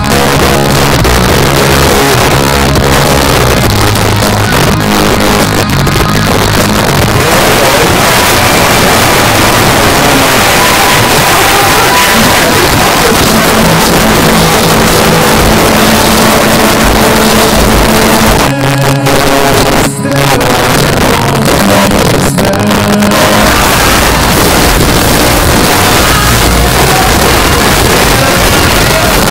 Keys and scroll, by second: 2.1 a, 2.4 Down, 2.9 Down, 3.2 Down, 3.4 Down, 3.5 Down, 3.7 Down, 3.9 Return, 18.4 Page_Down, 29.2 space.